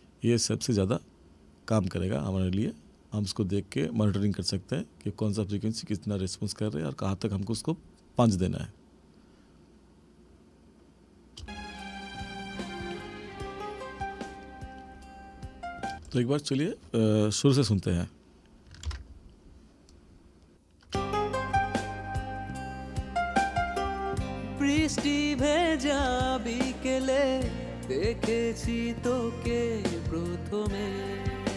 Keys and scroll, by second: 11.4 space, 16.0 space, 18.9 ctrl+=, 20.9 space, 26.0 ctrl+=.